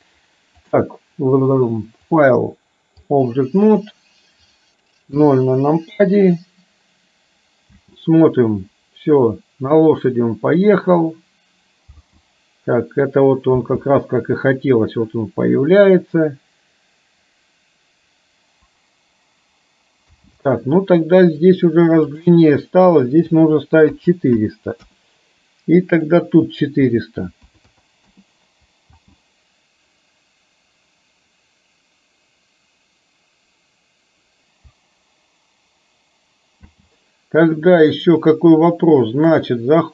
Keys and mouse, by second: 0.7 click, 2.3-3.4 drag, 5.3 KP_0, 7.8 space, 12.2 space, 13.7 space, 20.1 space, 22.2-25.0 drag, 26.1-28.2 drag, 27.8 KP_0, 29.0 space, 36.8 space.